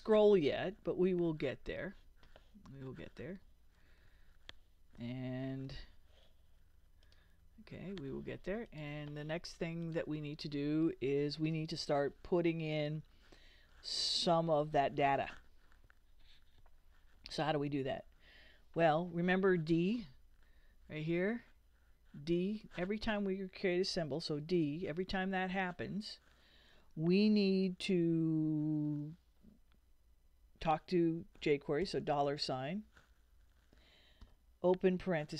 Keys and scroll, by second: 1.1 super+w, 3.8 super+r, 5.5 super+w, 11.4 Return, 24.4 d, 24.8 ., 31.8 shift+4, 34.2 shift+9.